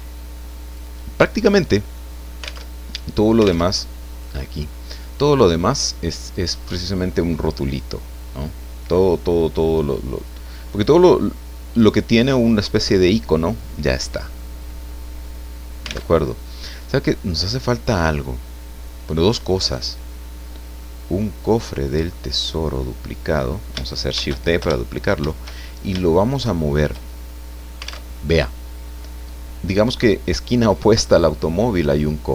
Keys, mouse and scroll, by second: 2.4 alt+click, 2.7 alt+Tab, 3.7 alt+Tab, 4.1 click, 16.1 alt+Tab, 16.6 scroll down 2, 17.1-19.9 drag, 20.8-21.3 scroll up 2, 21.8 right click, 22.7 click, 24.1 shift+d, 25.1 shift+Return, 25.6-26.0 shift+scroll down 2, 26.0-28.1 shift+drag, 28.1 alt+Tab.